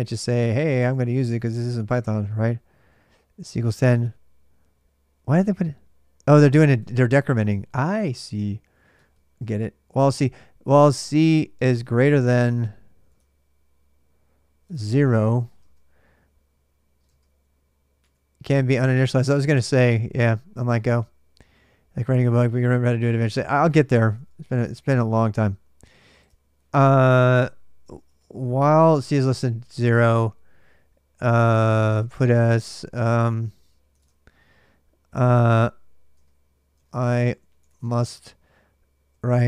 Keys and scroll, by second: 0.0-1.6 typing, 2.1 super+Tab, 6.5 super+Tab, 7.1 ctrl+[, 7.1 ctrl+j, 7.3-9.2 typing, 11.0-11.7 typing, 12.9 super+Tab, 14.4 super+Tab, 14.8-15.5 typing, 16.8-17.8 typing, 18.7 super+Tab, 23.9 super+Tab, 24.4 super+Tab, 27.6-29.4 typing, 27.8 Return, 31.1-33.7 typing, 33.7 super+Tab, 35.3 Tab, 35.7-39.4 typing.